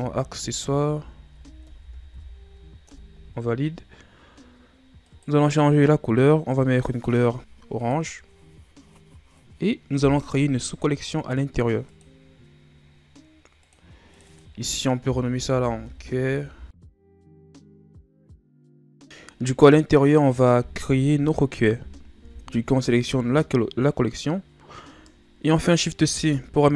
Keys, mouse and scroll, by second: 0.1 c, 1.0 s, 10.0-13.6 right drag, 13.6 click, 14.1 click, 14.3 click, 16.5 l, 19.0 click, 26.0 shift+c.